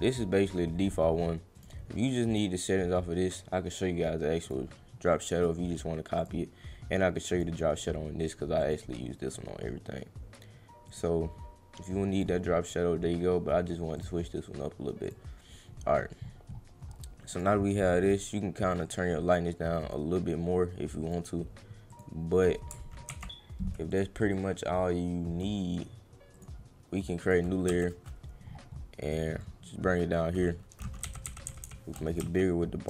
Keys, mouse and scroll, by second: 1.6 click, 2.3 click, 4.4 click, 5.3 click, 6.1 click, 7.3 right click, 8.6 click, 10.8 click, 12.2 click, 13.9 click, 15.0 click, 15.6 middle click, 17.3 click, 18.0 click, 18.8 click, 21.8 click, 22.4 click, 23.9 click, 24.3-25.4 drag, 26.3 click, 27.2 click, 29.4 click, 32.2 Caps_Lock.